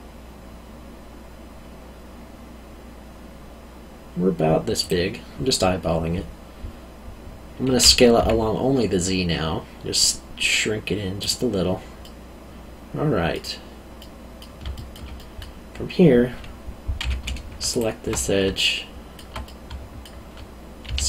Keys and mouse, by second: 4.8 click, 7.7 s, 8.1 z, 11.2 click, 12.0 middle click, 14.7 alt+middle click, 17.0 2, 17.7 alt+click, 18.1 middle click, 19.4 middle click, 20.8 s.